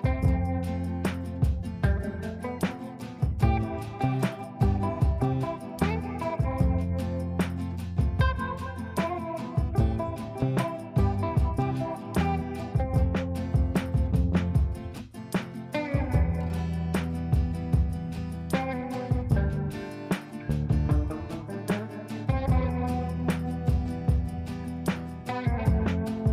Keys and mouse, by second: 0.7 click, 1.6 shift+click, 2.3 e, 2.8-5.8 drag, 4.7-6.1 ctrl+drag, 5.8 ctrl+right click, 6.7 click, 7.7 ctrl+a, 10.5 shift+Return, 14.8 ctrl+space, 16.8 click, 19.4-22.2 drag, 25.4 shift+click, 26.1 e.